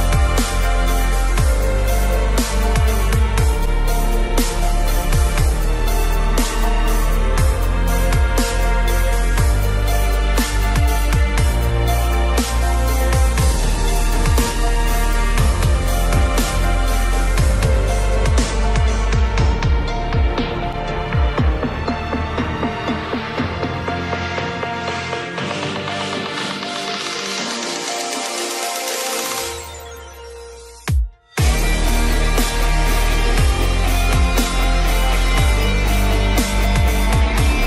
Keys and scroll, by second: 4.5 Return, 5.9 ctrl+j, 9.3 ctrl+t, 11.2 Return, 12.4 ctrl+j, 15.9 ctrl+t, 24.4 ctrl+e.